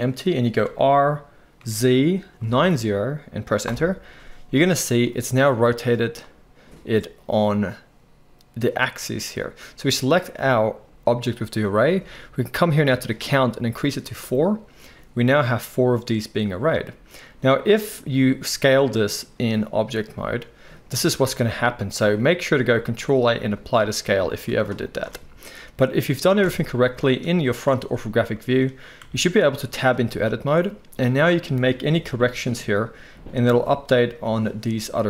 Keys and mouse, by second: 0.6 r, 10.1 click, 10.2-13.2 middle drag, 13.2-34.3 drag, 18.2 s, 22.8 ctrl+a, 24.3 s, 26.4 KP_1, 29.0 Tab, 29.9 z, 31.9 g, 34.3-35.0 middle drag.